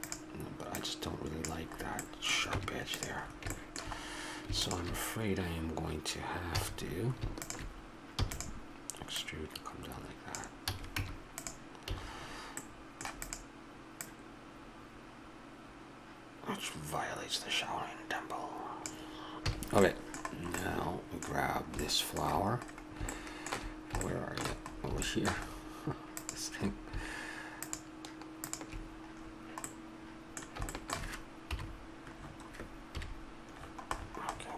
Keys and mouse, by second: 0.0-1.1 drag, 2.1 middle click, 2.5 Tab, 4.6-6.4 drag, 6.6 a, 8.2 e, 10.7 a, 11.0 Tab, 11.9 a, 12.1-13.2 middle drag, 13.2-15.8 drag, 19.5 a, 19.5 middle click, 26.2-30.1 drag, 30.1-31.5 middle drag, 31.5 KP_7, 33.0 KP_Decimal.